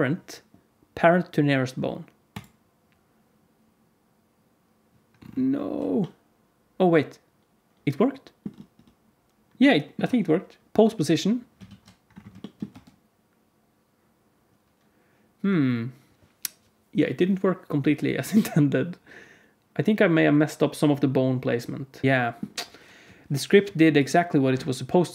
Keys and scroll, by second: 11.6 alt+shift+z, 12.6 space, 22.0 alt+z, 22.9 KP_1.